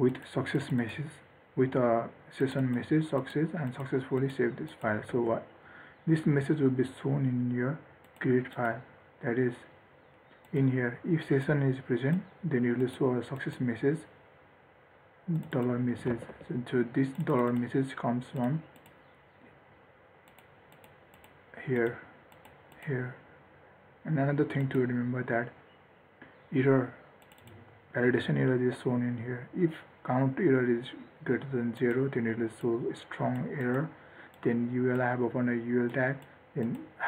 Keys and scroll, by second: 5.5 ctrl+s, 16.5 ctrl+s.